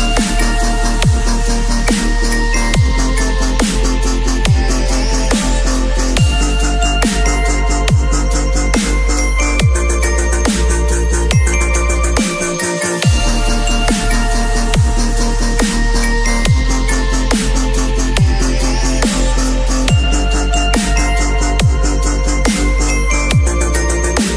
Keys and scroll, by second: 8.0 ctrl+t, 21.2 b, 23.1 ].